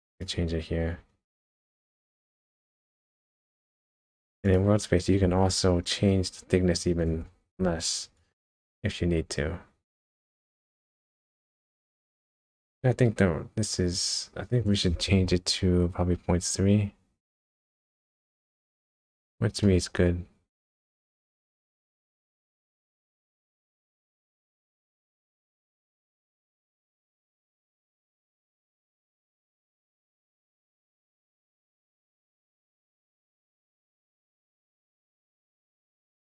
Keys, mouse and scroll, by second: 0.1 click, 2.8 click, 5.4-6.7 scroll up 11, 8.2 click, 19.6 middle click, 28.8 middle click, 32.7 KP_0, 33.5 middle click, 34.5 scroll down 1, 34.6-35.0 scroll up 1, 35.0 KP_0, 35.9 KP_0.